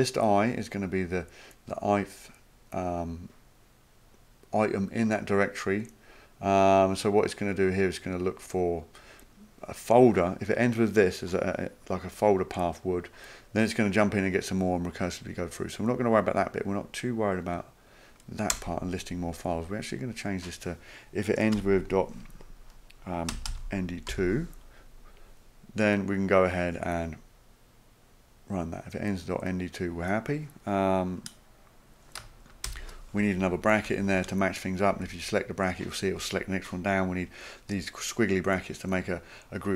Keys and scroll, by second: 18.5 BackSpace, 21.6 typing, 23.0-24.1 typing, 32.6 {, 33.9 Left, 34.9 Right.